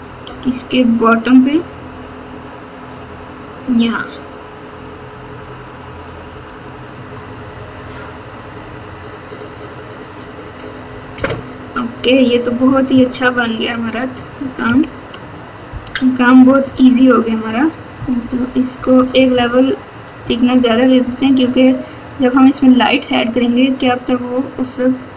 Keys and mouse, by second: 0.2 g, 4.2 middle click, 5.3 click, 6.2 s, 11.1 KP_8, 12.9 ctrl+KP_2, 13.4 ctrl+KP_2, 13.5 ctrl+KP_2, 13.5 ctrl+KP_2, 14.6 KP_1, 16.6 ctrl+KP_8, 17.1 ctrl+KP_8, 17.2 ctrl+KP_8, 17.9 ctrl+KP_4, 18.1 ctrl+KP_4, 18.3 ctrl+KP_4, 18.9-20.2 typing, 23.7 click.